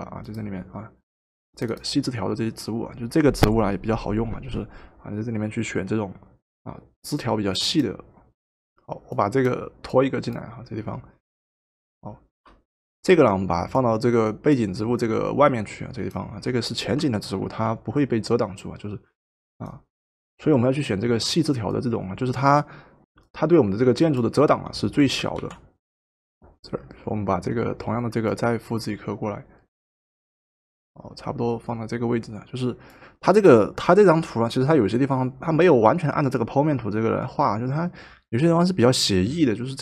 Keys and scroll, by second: 12.3 Return, 17.5 ctrl+t, 25.3 ctrl+z, 26.0 Return.